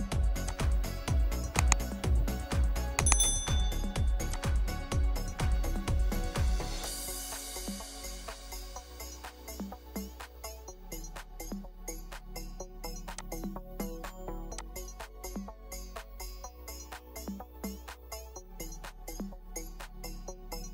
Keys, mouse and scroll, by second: 0.8-1.1 scroll up 1, 1.1 scroll down 1, 1.4 middle click, 1.5-2.7 scroll up 1, 4.8-5.2 scroll up 1, 5.7 middle click, 6.6-7.0 scroll up 1, 7.5 middle click, 8.7-9.0 scroll down 1, 9.3 middle click, 11.5-13.1 scroll down 1, 15.5 scroll up 1, 16.9-19.1 scroll down 1.